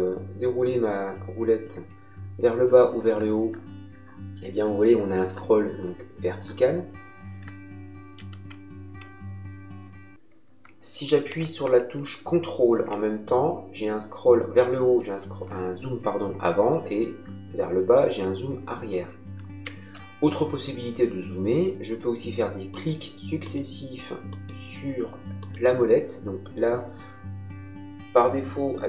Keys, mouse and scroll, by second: 22.7 middle click.